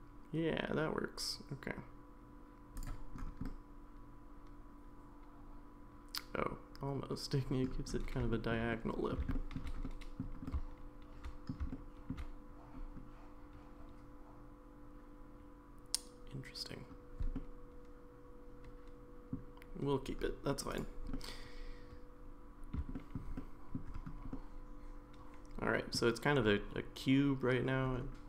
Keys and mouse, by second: 3.4-7.6 middle drag, 8.3 shift+middle click, 8.7 middle click, 9.3 shift+middle click, 9.8 middle click, 10.5-11.5 shift+middle drag, 11.7 shift+middle click, 17.4-19.3 middle drag, 21.1-22.8 middle drag, 22.9 shift+middle click, 23.4 middle click, 24.3-26.0 middle drag.